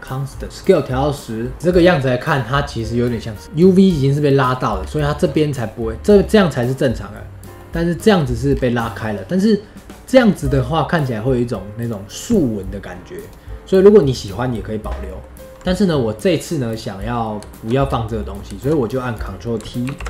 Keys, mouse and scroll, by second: 0.0-1.5 drag, 1.5-3.4 scroll up 1, 4.7 scroll down 1, 5.0 middle click, 5.3 scroll up 2, 5.5-8.5 middle drag, 8.5 scroll down 3, 8.8-10.4 middle drag, 10.4-10.9 scroll up 3, 10.9 middle click, 11.8-12.3 drag, 13.1-14.9 drag, 14.9-15.6 middle drag, 15.6 click, 16.6-17.8 middle drag, 17.8-18.1 scroll down 1, 18.1-19.1 middle drag, 19.1 click, 19.8 ctrl+t.